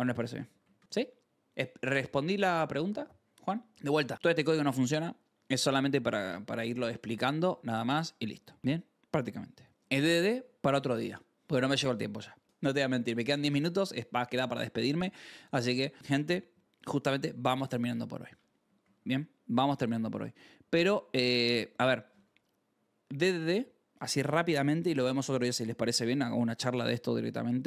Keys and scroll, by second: 0.0 k, 0.2 ctrl+s, 0.7 shift+g, 3.6-4.5 typing, 6.1-7.8 typing, 7.9 Escape, 8.6 ctrl+s, 13.9 ctrl+t, 15.4 ctrl+w, 18.7 shift+d, 19.5 Return.